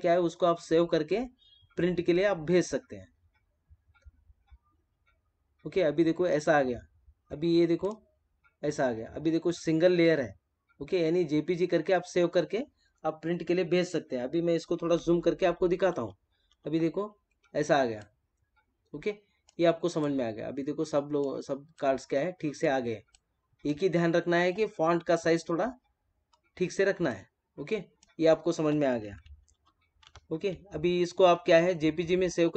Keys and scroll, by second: 14.9 ctrl+=, 17.5 space, 26.8 space, 29.5 ctrl+-, 31.4 ctrl+-.